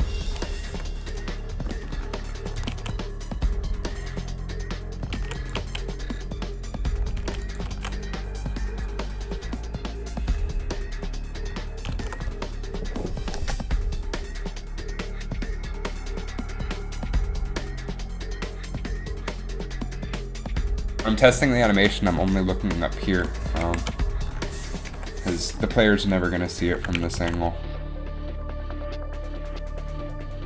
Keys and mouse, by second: 0.8 i, 2.9 alt+a, 5.5 alt+a, 5.7 alt+a, 7.5 alt+a, 7.9 alt+a, 8.6 alt+a, 11.1 alt+a, 12.1 alt+a, 23.8 shift+Left, 25.0 KP_3, 27.3 alt+a, 29.5 alt+a.